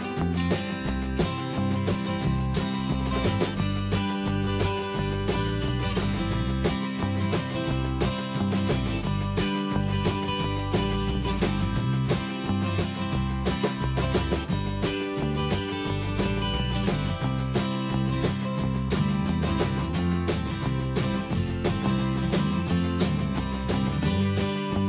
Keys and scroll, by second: 9.3 Left, 21.6 ctrl+space.